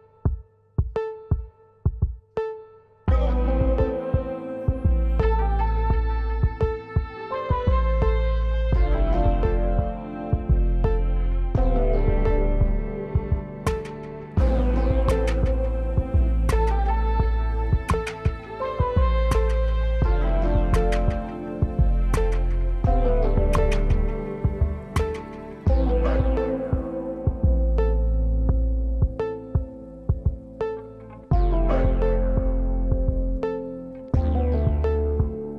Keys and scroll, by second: 31.6 space, 33.7 space.